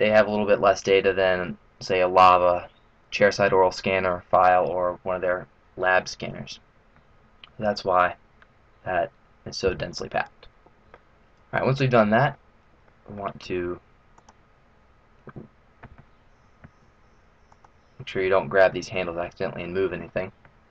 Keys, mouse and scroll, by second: 11.6 middle click, 12.4-13.0 scroll down 3, 12.7 middle click, 14.2 click, 16.9 ctrl+z, 17.6 click.